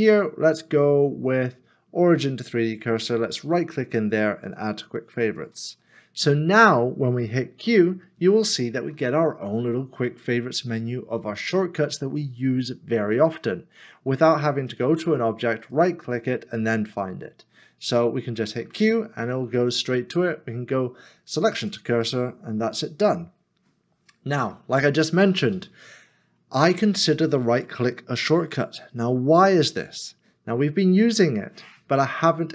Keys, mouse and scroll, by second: 2.7 right click, 7.7 q, 15.6 q, 15.7 right click, 26.4-28.4 scroll down 1.